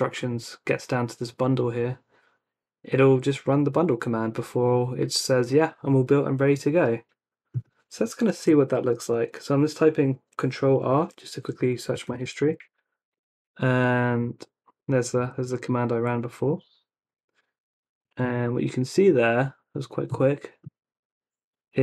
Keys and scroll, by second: 8.3 ctrl+r, 11.7-13.1 typing, 15.2 Tab, 16.5 Return.